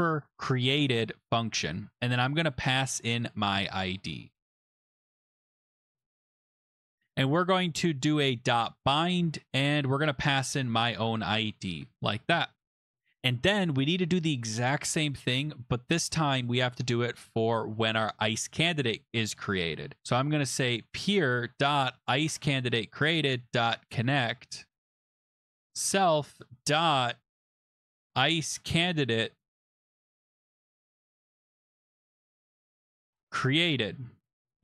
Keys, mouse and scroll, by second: 0.0-3.4 typing, 5.3 click, 6.4 click, 6.6 BackSpace, 6.7 BackSpace, 6.8 BackSpace, 8.1-12.2 typing, 12.9 Return, 17.3 click, 20.0 click, 20.5-34.6 typing, 23.7-24.8 drag, 24.8 Tab.